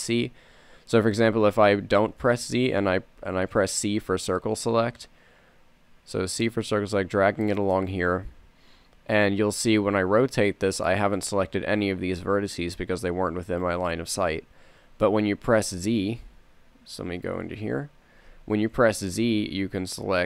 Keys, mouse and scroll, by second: 1.6 z, 2.5 a, 3.2 c, 14.9 KP_3, 16.5 KP_3, 17.0 KP_1, 18.7 a, 19.3 z, 19.8 c.